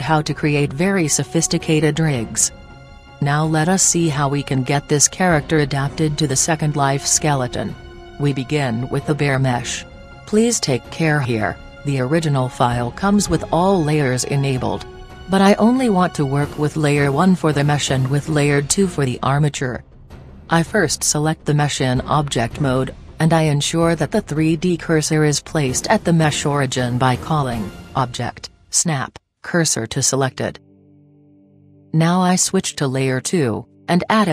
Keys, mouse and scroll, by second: 17.2-18.7 drag, 21.3-22.8 right drag, 27.8-29.6 drag, 33.4-34.3 drag, 33.8 scroll up 1.